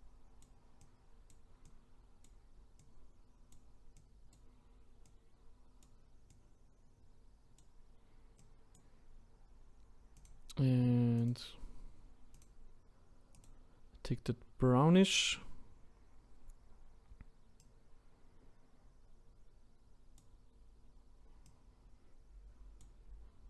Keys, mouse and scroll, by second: 16.1-17.6 scroll up 1, 17.6-20.6 drag, 21.4-23.4 drag.